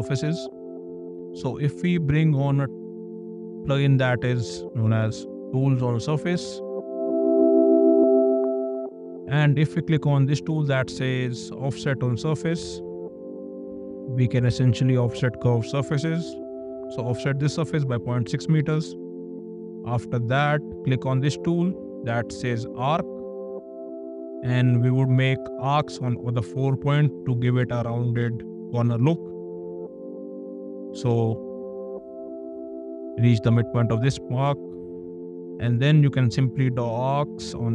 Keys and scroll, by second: 2.2 ctrl+`, 4.5-5.4 typing, 16.3 6, 17.4 Return, 18.7 space.